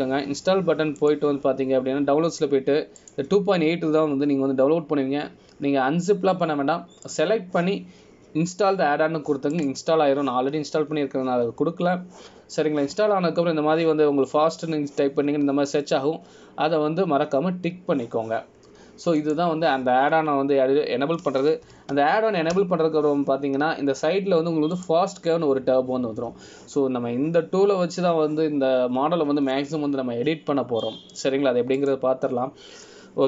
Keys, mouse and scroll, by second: 24.7 n, 26.9 click, 33.0 middle click.